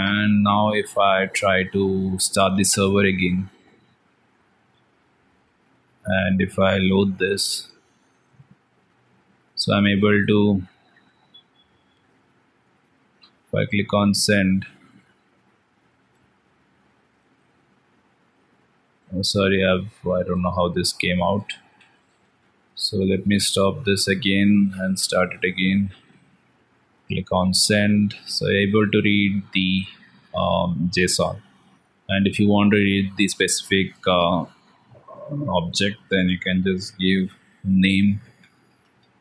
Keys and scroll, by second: 0.5 ctrl+s, 5.2 alt+Tab, 8.8 alt+Tab, 14.2 alt+Tab, 20.6 ctrl+x, 21.6 ctrl+v, 22.1 ctrl+s, 23.1 ctrl+c, 25.6 alt+Tab, 38.0 ctrl+s, 38.6 alt+Tab.